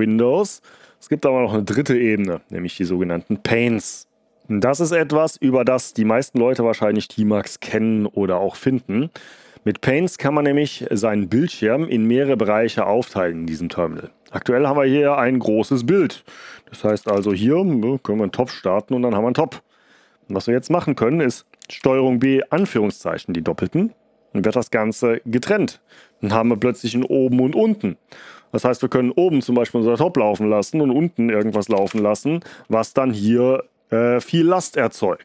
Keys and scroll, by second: 16.7-17.5 typing, 21.7 ctrl+b, 22.5 ", 31.1-32.2 typing.